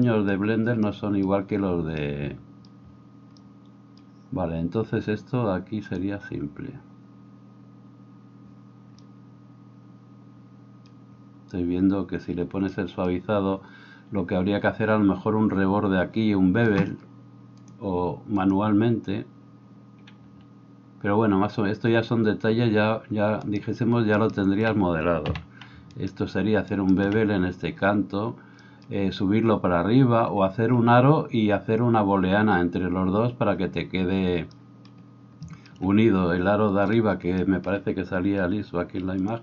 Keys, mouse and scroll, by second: 17.7-39.4 drag, 24.1 alt+right click, 25.8 alt+a.